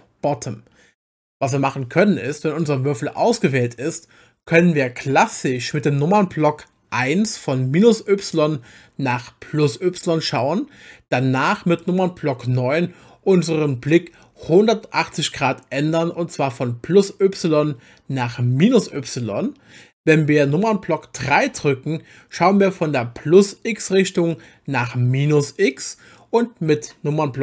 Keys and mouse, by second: 2.6 click, 6.9 KP_1, 14.6 KP_9, 21.3 KP_3.